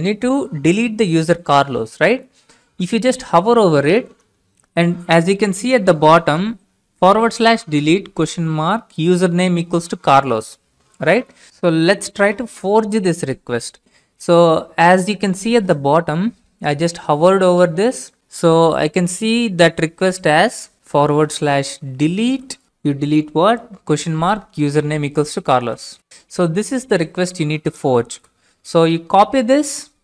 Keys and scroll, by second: 21.0-26.5 typing, 28.0 ctrl+c.